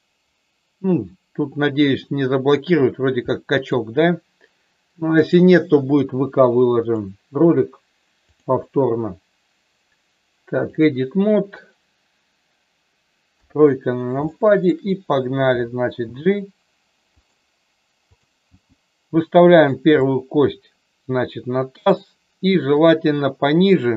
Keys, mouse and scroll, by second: 3.3 middle click, 5.4 click, 6.9 click, 8.3-10.9 drag, 13.3 KP_3, 14.3 shift+middle click, 16.0 g, 18.4 g, 19.5 click, 20.0-21.9 middle drag, 22.8 click.